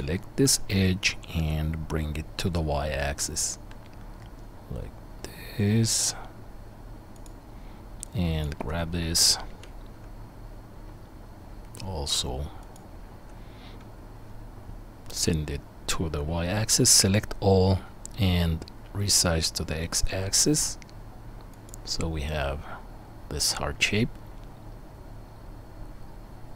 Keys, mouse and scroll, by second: 1.4 g, 8.1-12.9 drag, 9.2 g, 16.6 a, 18.8 s, 22.3-26.5 middle drag, 23.7 Tab.